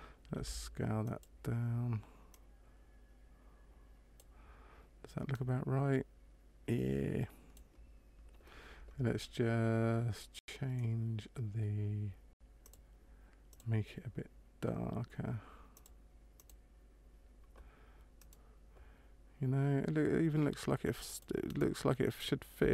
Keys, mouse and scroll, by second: 0.4 s, 2.4 click, 5.3 click, 12.6 click, 13.4 click, 18.2 right click, 21.0 click, 21.5 right click.